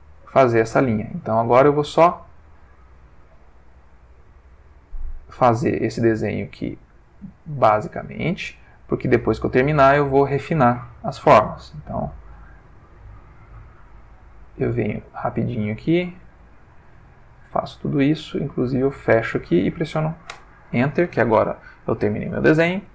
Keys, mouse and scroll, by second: 0.9 click, 1.6 click, 2.3 click, 2.9 click, 3.6 click, 4.2 click, 5.0 click, 5.8 click, 6.7 click, 7.5 click, 8.3 click, 9.1 click, 10.0 click, 10.8 click, 11.7 click, 12.2 click, 12.7 click, 13.4 click, 14.0 click, 14.5 click, 15.3 click, 15.9 click, 16.5 click, 17.4 click, 18.9 click, 20.3 Return, 21.4-22.4 ctrl+middle drag.